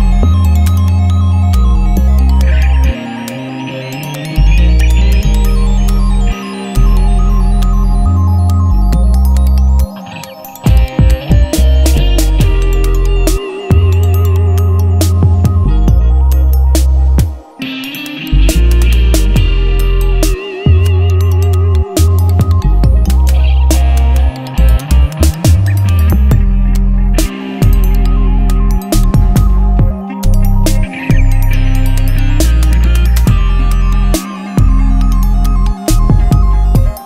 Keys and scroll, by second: 3.5-4.9 typing, 13.4 Return, 13.8 v, 13.9 Right, 14.9 Return, 15.2 ctrl+z, 16.4 ctrl+alt+z, 17.6 v, 19.3 Down, 19.8 Left, 20.0 Up, 21.0 ctrl+t, 21.8 Up, 22.7 Return, 30.2 Down, 30.7 Left, 30.8 Down, 31.3 Right, 33.5 t, 34.9-37.0 typing.